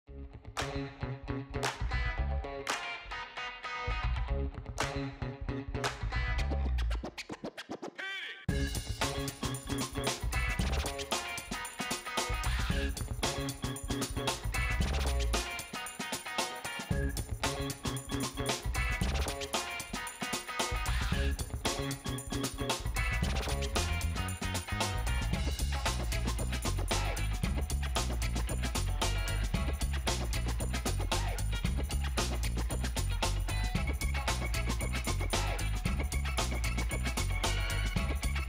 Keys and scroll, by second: 0.2 space, 17.4 7, 18.4 Tab, 22.9-23.9 typing, 25.1 Return, 32.0 space.